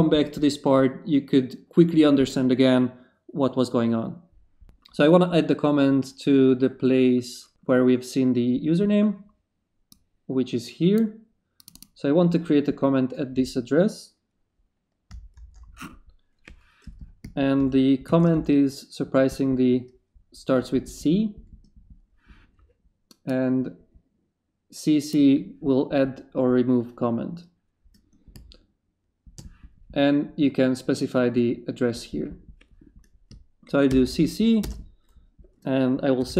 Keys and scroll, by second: 4.6 BackSpace, 15.3 ctrl+shift+c, 17.6 shift+c, 18.1 shift+/, 18.3 shift+Return, 19.3 Return, 33.9 shift+c, 34.6 shift+space, 35.9-36.3 typing.